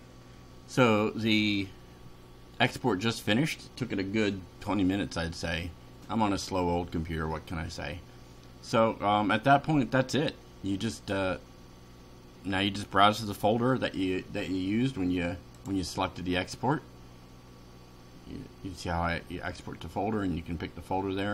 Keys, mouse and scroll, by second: 15.6 click.